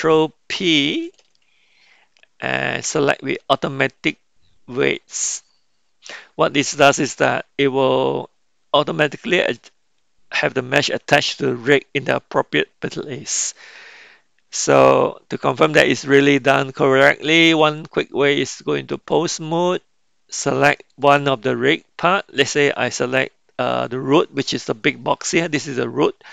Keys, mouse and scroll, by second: 1.0 ctrl+p, 17.6-19.2 drag, 20.8 click.